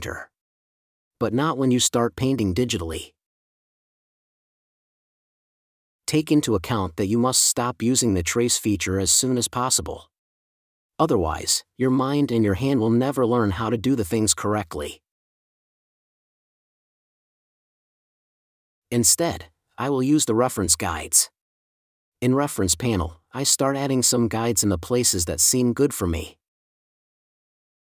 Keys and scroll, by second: 0.0-0.3 typing, 5.8 super+-, 12.6 super+-.